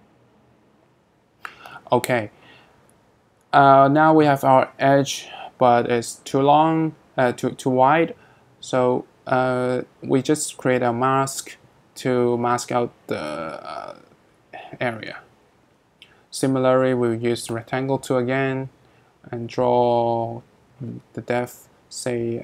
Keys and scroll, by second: 14.2 r.